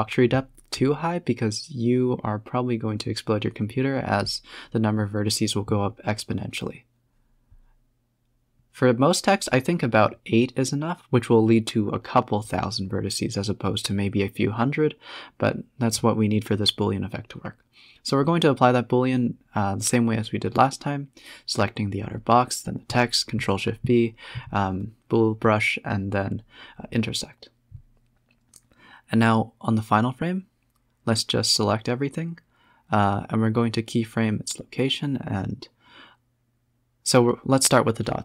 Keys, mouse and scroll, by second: 0.0-1.1 typing, 1.2 scroll up 5, 1.4 click, 2.0 Tab, 2.4 Tab, 3.3 click, 3.6 Tab, 4.0 scroll down 2, 4.4 middle click, 4.8-5.4 scroll up 12, 5.4 Tab, 5.6-7.6 middle drag, 7.6 click, 7.7-8.4 scroll down 8, 8.1 middle drag, 8.4 z, 9.1 a, 9.2 a, 10.4 alt+h, 11.2 z, 11.8 shift+click, 12.2 shift+click, 12.9 ctrl+shift+b, 14.2 z, 15.0 click, 15.3 s, 19.8 z, 20.8-21.1 scroll up 1, 21.1-21.6 scroll down 1, 21.6 shift+click, 22.1 shift+click, 26.3 s, 28.6 click, 29.4 shift+click, 30.2 shift+click, 30.9 shift+click, 37.3 click.